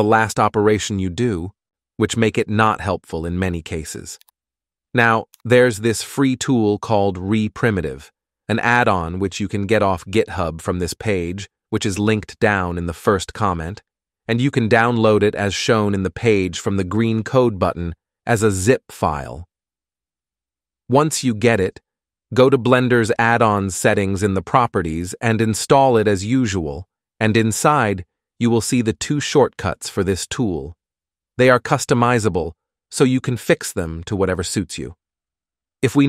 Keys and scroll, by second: 4.4 g, 5.2 F9.